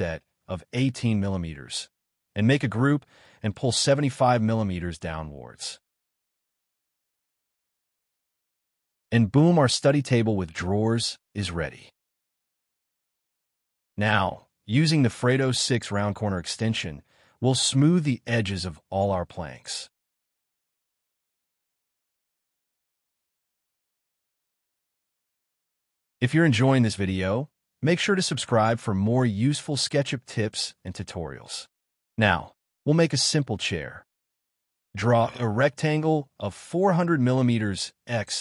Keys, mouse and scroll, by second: 0.0-0.9 typing, 0.9 scroll up 1, 2.4 double click, 5.1 Delete, 6.1 double click, 6.2-8.6 typing, 6.8 Escape, 7.0 double click, 8.7 Escape, 8.7-9.2 scroll down 2, 9.0 Escape, 9.4 middle click, 10.6 scroll up 1, 10.7 scroll down 2, 10.9 shift+middle click, 11.1 shift+scroll, 11.3 scroll up 1, 11.4 shift+middle click, 12.4 ctrl+s, 13.7 right click, 15.2 middle click, 15.8 double click, 17.6 5, 17.7 Return, 18.2 scroll up 1, 18.6 Return, 18.8 space, 18.9 scroll down 1, 19.1 scroll up 1, 19.3 double click, 19.5 scroll down 1, 20.6 2, 21.5 space, 21.6 Escape, 21.7 scroll down 1, 21.8 scroll up 1, 21.9 double click, 22.1 scroll down 1, 22.2 Escape, 22.6 double click, 23.7 space, 23.8 scroll up 1, 23.9 middle click, 25.4 ctrl+s, 25.7 scroll up 1, 25.9 double click, 26.7 space, 26.8 Escape, 26.9 scroll up 1, 27.3 double click, 28.0 space, 28.1 Escape, 28.2 scroll down 1, 28.3 scroll up 1, 28.5-28.9 scroll down 2, 28.6 space, 28.7 Escape, 28.9 Escape, 29.0 middle click, 29.4 scroll up 1, 29.7 middle click, 30.0 scroll down 1, 30.2 shift+scroll up 1, 31.0 scroll down 1, 31.4 middle click, 32.2 shift+middle click, 33.1 middle click, 33.5 scroll up 1, 35.9 Return, 37.6 m, 38.0 middle click.